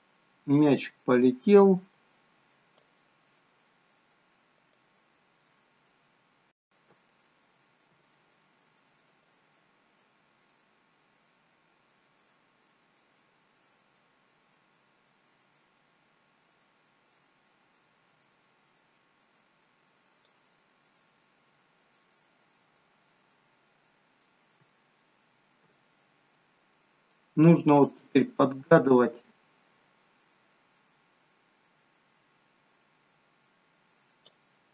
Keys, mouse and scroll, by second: 5.7 click, 5.8-6.2 scroll up 4, 6.5-7.1 scroll up 6, 7.1 shift+middle click, 9.7 click, 21.0-22.3 scroll down 9, 22.1 middle click, 23.3-23.8 scroll up 3, 23.8-24.5 scroll down 1, 24.6 shift+middle click, 25.9-26.4 scroll up 1, 26.4-27.1 scroll down 2, 27.1 middle click, 27.1 scroll down 1, 29.5 click.